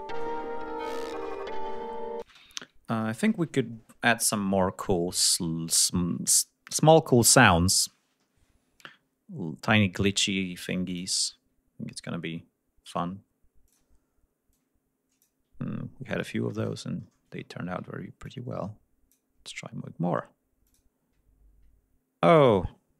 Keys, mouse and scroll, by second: 1.8 scroll up 2, 2.2 space, 2.4 ctrl+scroll up 2, 3.5-3.9 scroll up 2, 7.3 click, 8.2-8.9 scroll down 1, 8.9-9.4 scroll up 1, 10.8 click, 11.2-11.5 scroll up 1, 13.6 click, 14.4 click, 15.6-16.0 ctrl+scroll up 2, 17.3 ctrl+scroll up 2, 18.2 click, 20.6 click, 22.3 click.